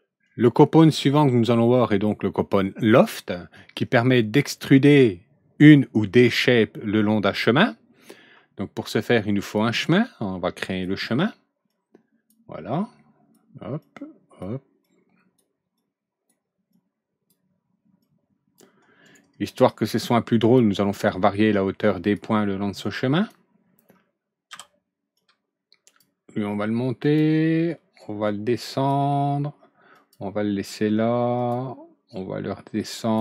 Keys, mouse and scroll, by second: 9.4 click, 10.6 click, 11.6 click, 12.7 click, 13.8 click, 14.8 click, 15.7 click, 16.7 click, 18.0 click, 19.0 right click, 20.4 click, 22.0 click, 22.8-23.2 drag, 24.4 w, 25.2 click, 27.0 click, 28.0 click, 29.9 click, 31.3 click, 32.1-33.1 drag.